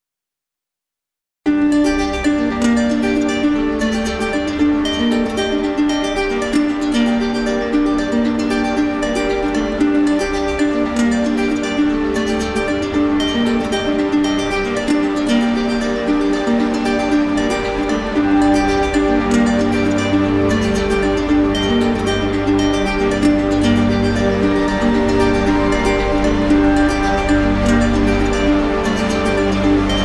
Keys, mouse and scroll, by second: 0.5 right click, 0.8 ctrl+z, 1.6 click, 3.4 alt+click, 3.9 alt+click, 4.3 ctrl+z, 7.8 alt+click, 8.5 right click, 9.8 right click, 9.9 ctrl+z, 11.9 right click, 14.6 alt+click, 14.8 ctrl+z, 18.2 alt+click, 19.3 shift+click, 20.0 shift+click, 20.6 shift+click, 22.3 right click, 22.7 right click, 23.7 right click, 23.8 ctrl+z, 24.3 ctrl+z, 25.1 ctrl+z, 26.4 right click, 27.1 right click, 28.0 shift+click, 28.4 shift+click, 28.8 shift+click, 29.2 shift+click, 29.5 shift+click, 29.9 shift+click.